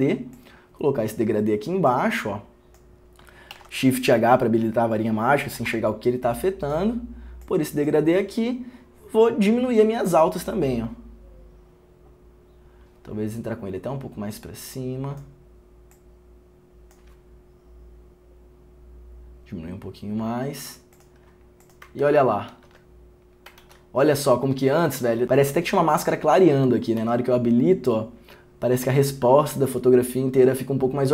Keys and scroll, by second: 22.2 ctrl+d, 22.7 ctrl+d.